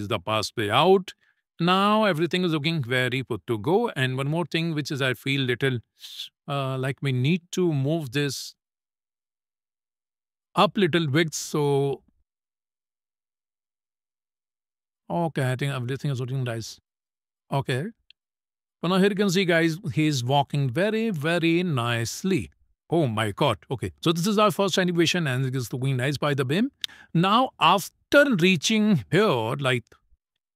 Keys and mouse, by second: 4.3 click, 7.7 click, 8.6 click, 9.8 click, 10.4-15.1 drag, 16.2 click, 17.8 shift+middle click, 19.2 click, 19.6 space.